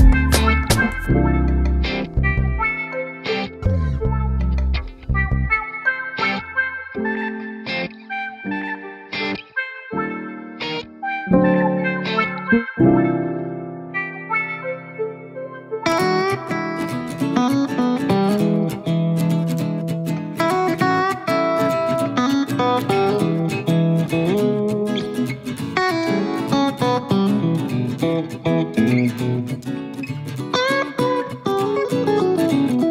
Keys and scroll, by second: 6.7 super+c, 6.9 super+v.